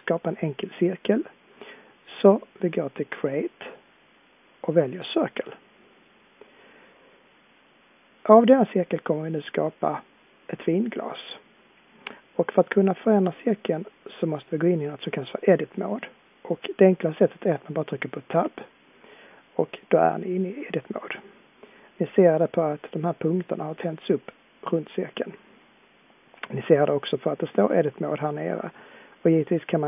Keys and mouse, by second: 18.3 Tab.